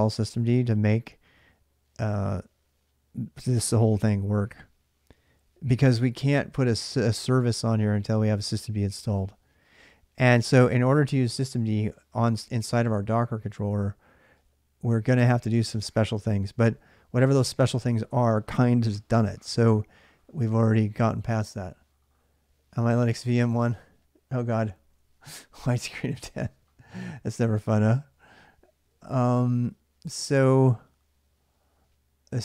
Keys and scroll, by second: 32.2-32.4 typing.